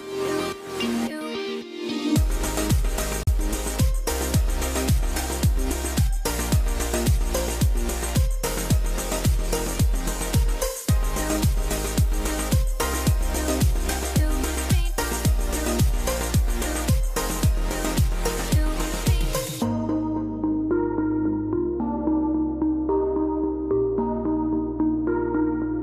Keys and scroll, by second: 3.5 F12.